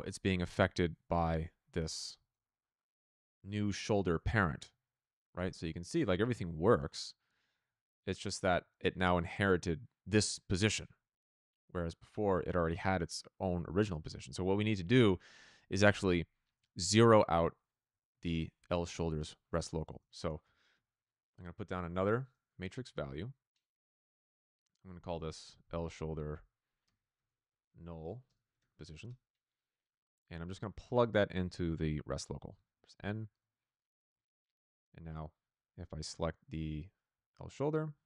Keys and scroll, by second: 1.8 z, 5.3 r, 19.9 Tab, 20.3-22.4 typing, 23.1 Return, 25.5 ctrl+c, 26.3 ctrl+v, 27.1 n, 28.2-29.0 typing, 32.9 n.